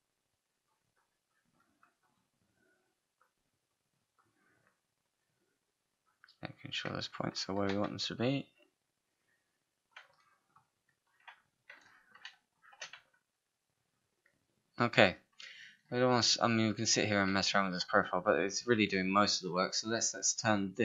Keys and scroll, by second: 7.7 w, 12.3 space, 20.1 5.